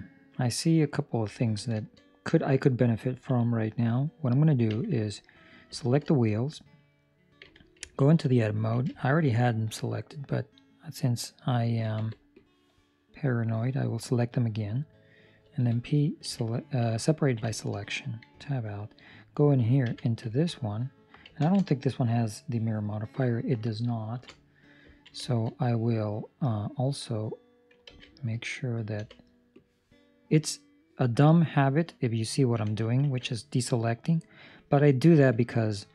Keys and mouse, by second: 1.7 shift+middle click, 3.0 ctrl+middle click, 4.7 Tab, 5.0 right click, 5.7 ctrl+middle click, 6.1 shift+middle click, 6.3 middle click, 7.4 Tab, 7.7 ctrl+middle click, 8.8 alt+a, 11.9 b, 17.1 ctrl+middle click, 17.4 shift+middle click, 18.3 Tab, 18.6 right click, 19.8 Tab, 20.3 ctrl+middle click, 20.6 middle click, 21.3 ctrl+space, 24.1 ctrl+space, 24.9 ctrl+middle click, 25.1 shift+middle click, 25.5 middle click, 27.9 alt+a, 28.9 b, 35.7 ctrl+middle click.